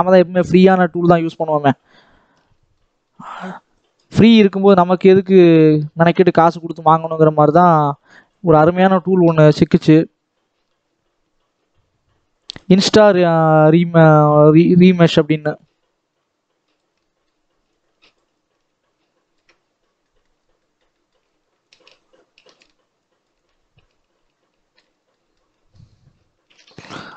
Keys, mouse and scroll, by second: 0.0 middle click, 0.6-2.4 drag, 2.4-3.6 middle drag, 3.6-7.0 drag, 7.0 middle click, 7.7-12.3 drag, 12.7 scroll down 2, 12.9 middle click, 13.5-13.9 scroll up 2, 13.9-15.3 middle drag, 15.3-16.9 shift+drag, 16.9 middle click, 17.6-19.4 drag, 19.4-19.9 scroll down 8, 19.9 shift+middle click, 20.2-20.5 scroll up 2, 20.5 middle click, 21.1-21.5 scroll up 1, 21.5-24.8 shift+drag, 24.8 scroll down 1, 25.0 middle click, 25.7-27.1 scroll down 5.